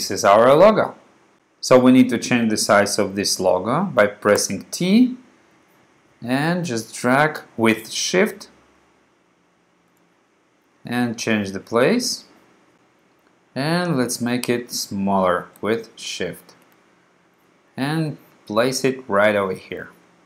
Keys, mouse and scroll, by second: 4.5 t, 5.7-10.1 drag, 11.0-12.7 drag, 13.9-16.9 drag, 17.3-19.6 drag, 19.6-20.2 drag.